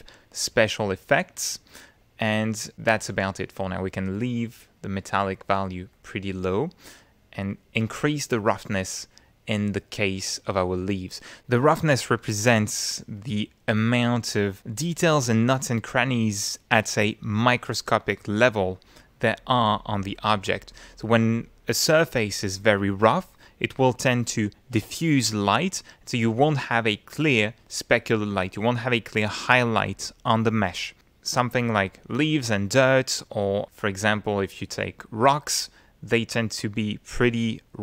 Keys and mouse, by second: 5.9 click, 7.5-11.3 drag, 12.8 middle click, 13.4 ctrl+middle click, 33.6 middle click.